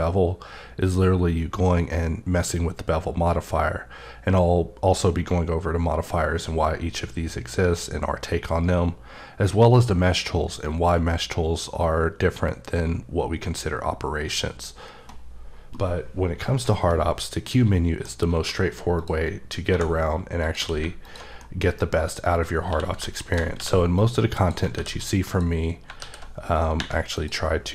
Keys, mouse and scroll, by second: 16.6-17.0 scroll down 1, 17.0-17.5 scroll up 1, 17.5 middle click, 18.4 q, 19.0 click, 19.7 1, 20.5 click, 20.6 q, 21.0 alt+click, 21.4 middle click, 21.7 scroll down 1, 22.7 q, 23.2 ctrl+shift+click, 23.6 x, 24.0 click, 24.8 alt+w, 25.0 click, 27.2 click.